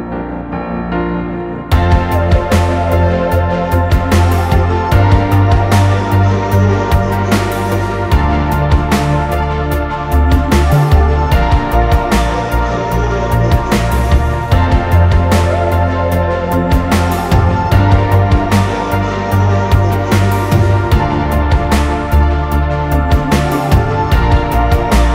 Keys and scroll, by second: 5.4-6.5 typing, 7.6 Up, 7.7 Up, 7.9 Up, 8.0 Up, 8.1 Up, 9.0 Up, 9.2 Up, 9.2-10.0 typing, 15.9 Return, 17.0 ctrl+shift+[, 21.5 ctrl+=.